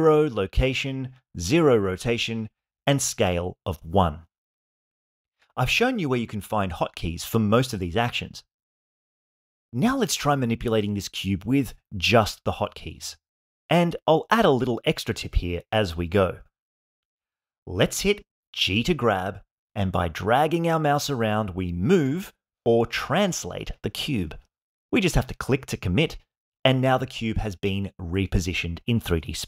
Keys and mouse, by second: 1.2 alt+g, 2.8 alt+r, 4.2 alt+s, 17.2 g.